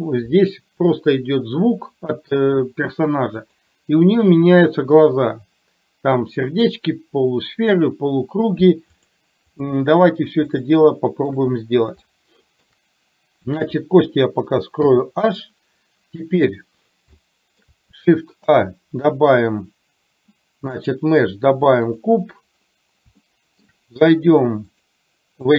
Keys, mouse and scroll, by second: 3.6 click, 9.1 click, 10.6 shift+middle click, 12.2 shift+middle click, 14.9 h, 17.2 shift+middle click, 18.6 shift+a, 23.4 shift+middle click, 24.7-25.5 drag.